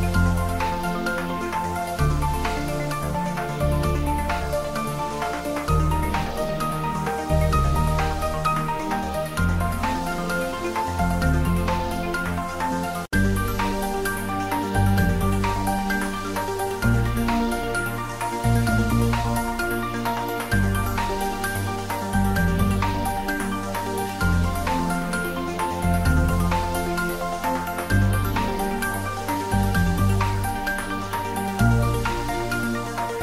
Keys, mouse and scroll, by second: 1.1 Return, 1.7 click, 2.3 Return, 3.0 click, 3.5 Return, 4.3-5.6 middle drag, 5.6-11.6 drag, 11.6-13.1 middle drag, 16.7 click, 19.5 ctrl+s, 20.6 middle click, 21.7 click, 22.0 ctrl+s, 27.2-29.4 middle drag, 30.0 middle click.